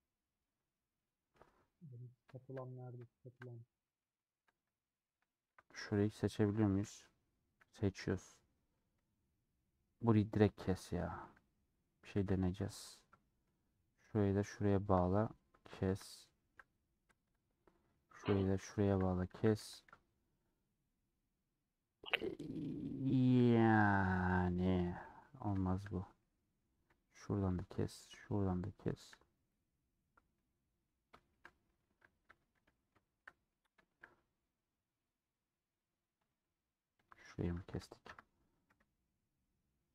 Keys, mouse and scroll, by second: 0.1 click, 0.9 middle click, 1.9-2.2 scroll down 4, 2.2-5.2 shift+middle drag, 5.6-6.7 middle drag, 6.7 alt+click, 7.0-7.7 scroll down 3, 8.7-10.0 middle drag, 10.2-12.2 middle drag, 12.2 a, 12.7-13.8 middle drag, 13.8 2, 14.0-15.3 drag, 15.4-15.8 scroll down 2, 16.0-17.2 shift+middle drag, 17.2 scroll up 2, 18.1 click, 19.4 a, 21.9-22.3 scroll down 3, 22.3 scroll up 1, 22.6 middle click, 23.2-23.6 scroll down 3, 23.6 middle click, 24.1 scroll up 1, 24.3-24.6 scroll down 2, 24.6 scroll up 1, 24.8 scroll down 3, 24.9-26.6 middle drag, 26.6-27.5 scroll up 1, 27.5 alt+click, 27.6-29.0 middle drag, 29.0 alt+shift+click, 29.5 middle click, 30.3-30.8 scroll up 3, 30.8-31.9 middle drag, 31.9 a, 32.6-34.1 middle drag, 34.1 scroll down 1, 34.3 scroll up 1, 34.5-35.1 scroll down 1, 35.1-37.1 scroll up 1, 36.4 click, 37.1 click, 38.6 KP_Decimal, 39.2-39.8 scroll down 8, 39.8 middle click.